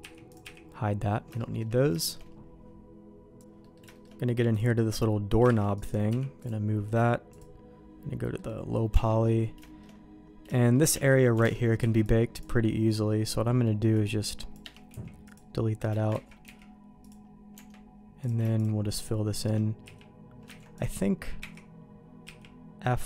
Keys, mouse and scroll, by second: 0.3 click, 1.3 shift+middle click, 2.0 shift+middle click, 3.4 ctrl+s, 3.6 middle click, 3.9 shift+middle click, 4.5 click, 5.4 shift+d, 6.0 m, 7.3 click, 8.2 middle click, 8.9 Tab, 9.6 shift+middle click, 10.5 shift+middle click, 10.9 Tab, 11.4 alt+a, 11.8 c, 14.9 x, 16.2 ctrl+z, 16.4 x, 17.5 Tab, 18.2 click, 18.5 shift+click, 19.8 f, 20.6 ctrl+z, 20.7 click, 21.4 4, 22.2 f.